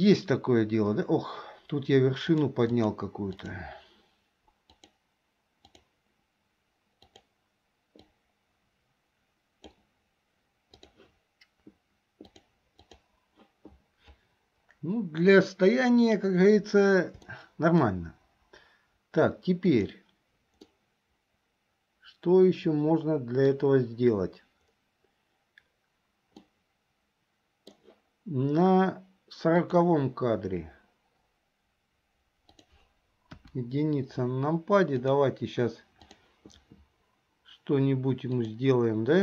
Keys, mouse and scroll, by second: 2.3 click, 2.7 click, 4.9-6.0 drag, 8.1-9.9 drag, 10.8 click, 12.4 click, 17.4 shift+middle click, 19.7 click, 20.9-23.6 middle drag, 26.5-27.9 middle drag, 29.7 click, 32.6 click, 33.4 KP_1, 35.0-36.4 drag, 38.4 click.